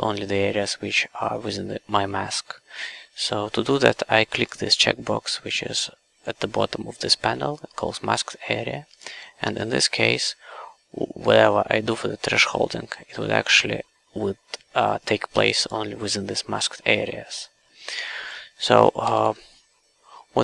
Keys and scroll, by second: 9.4 KP_Enter, 19.0 w.